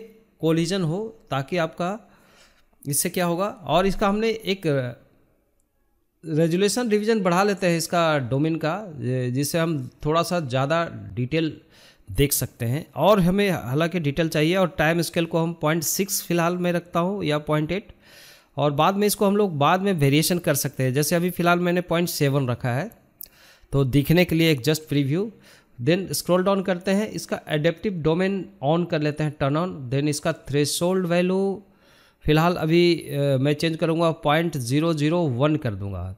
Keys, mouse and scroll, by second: 1.5-3.5 drag, 10.1 click, 11.7-13.8 drag, 18.1-21.8 drag, 24.0-25.4 scroll down 4, 25.4-25.7 drag, 25.7-27.0 scroll down 6, 27.0 click, 32.3-34.3 drag, 34.5 KP_0.